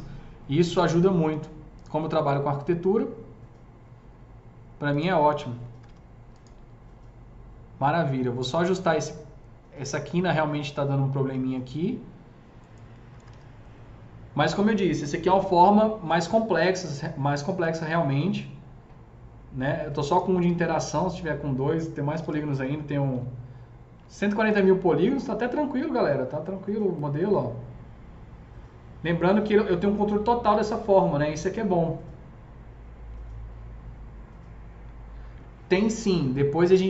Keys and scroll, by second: 5.4 F3, 5.7 F3, 5.8 F4, 12.8 F3, 13.2 F3, 13.3 F4, 21.8 F3, 22.0 F3, 22.1 F4, 23.0 7.